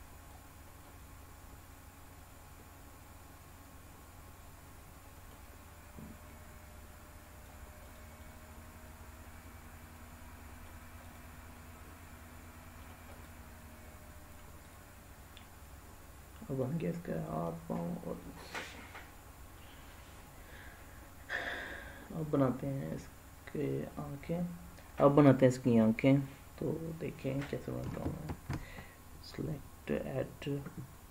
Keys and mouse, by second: 0.8-5.3 middle drag, 6.2-7.4 drag, 8.2-10.6 middle drag, 11.5-12.8 middle drag, 13.1 click, 14.6 click, 15.3-16.6 middle drag, 17.3 middle click, 21.6 middle click, 28.2 shift+a.